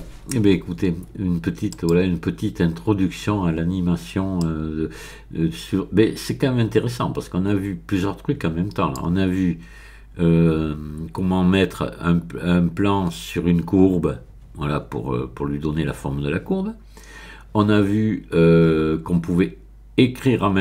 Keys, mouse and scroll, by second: 1.7 click, 4.4-9.3 drag, 9.3-12.7 middle drag.